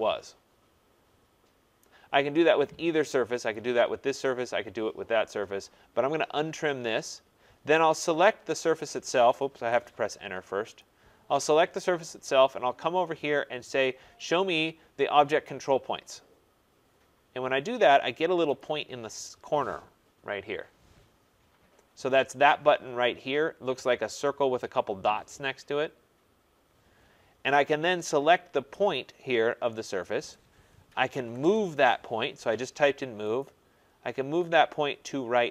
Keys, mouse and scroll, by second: 1.8 right click, 3.5 click, 7.9 click, 9.5 Return, 10.8 click, 15.4 click, 18.5 click, 30.9 typing, 31.4 Return, 33.3 typing, 33.4 click.